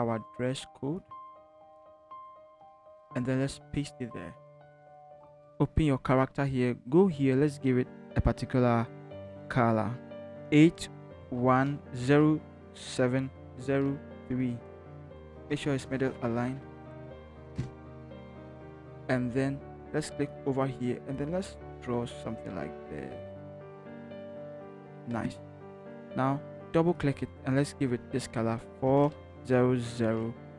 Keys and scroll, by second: 1.3 ctrl+c, 3.5 ctrl+v, 10.3-13.5 typing, 14.7 3, 15.2 ctrl+shift+t, 15.4 shift+Left, 17.1 Left, 17.5 Right, 18.3 v, 28.6-30.5 typing.